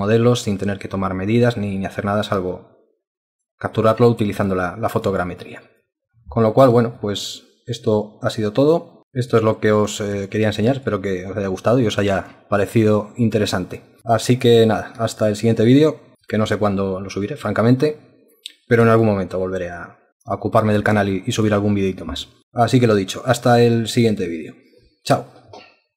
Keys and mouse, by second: 0.0 alt+click, 2.5 alt+click, 3.7 alt+click, 4.1 alt+click, 4.2 alt+double click, 4.4 alt+click, 5.1 alt+click, 5.4 alt+click, 5.8 alt+click, 7.0 alt+click, 9.3 alt+click, 10.2 alt+click, 10.5 alt+click, 10.7 alt+double click, 10.9 alt+click, 11.5 alt+click, 12.6 alt+click, 15.2 alt+click, 19.1 alt+click, 21.0 alt+click, 22.4 alt+click.